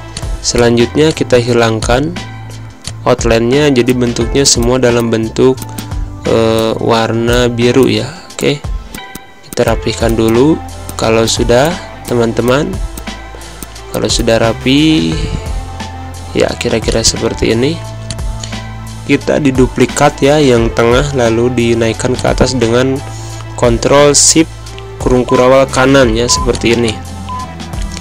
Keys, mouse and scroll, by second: 4.4 space, 4.5 click, 4.7 space, 4.9 click, 6.5 click, 10.9 click, 13.6 click, 16.8-19.6 drag, 19.6 ctrl+shift+\, 20.5 ctrl+shift+], 22.0-26.3 alt+shift+drag, 26.5 space, 26.7 click, 26.9 space, 27.8-28.0 drag.